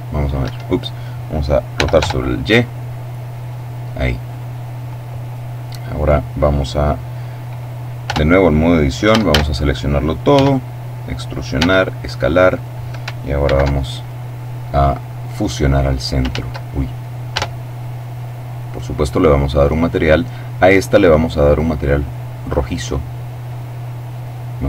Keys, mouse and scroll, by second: 0.3 Escape, 1.6 r, 1.9 y, 4.1 click, 7.9 Tab, 8.9 a, 10.2 e, 11.5 s, 12.4 click, 13.3 alt+m, 13.9 alt+click, 15.3 click, 16.1 ctrl+z, 17.2 Tab, 18.0-19.3 drag, 19.4 click, 21.1 click, 21.9-24.1 drag.